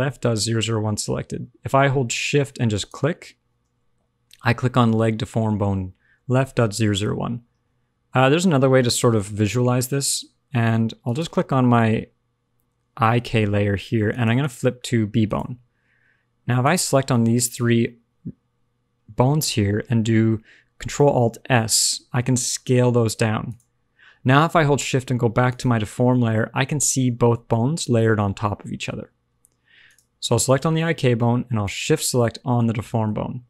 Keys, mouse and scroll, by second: 2.7 shift+click, 11.0 click, 14.3 click, 16.6 shift+click, 17.3 click, 21.5 ctrl+alt+s, 25.4 shift+click, 26.0 middle click, 28.9 scroll up 1, 29.8 click, 31.5 shift+click, 32.3 scroll down 1, 32.5 middle click.